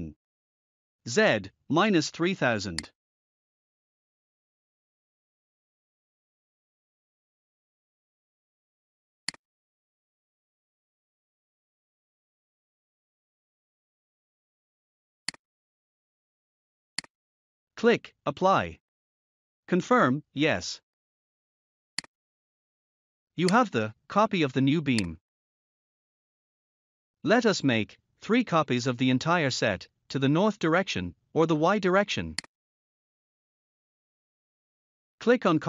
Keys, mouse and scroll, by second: 2.7 click, 9.1 click, 11.0-12.9 typing, 15.1 click, 16.8 click, 21.8 click, 23.3 click, 24.8 click, 25.6 scroll down 1, 32.2 click, 33.4 scroll down 1, 33.9 scroll up 1.